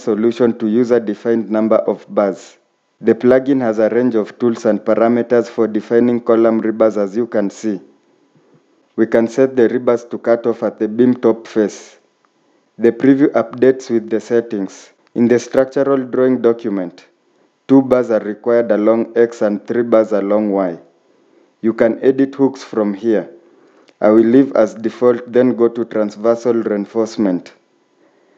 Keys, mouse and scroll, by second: 17.6 typing.